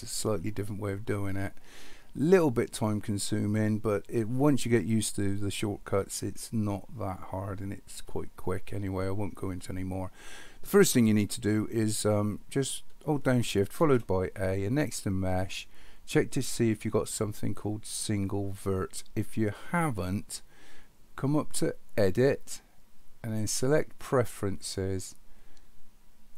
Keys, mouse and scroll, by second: 13.8 shift+a, 22.2-24.3 drag.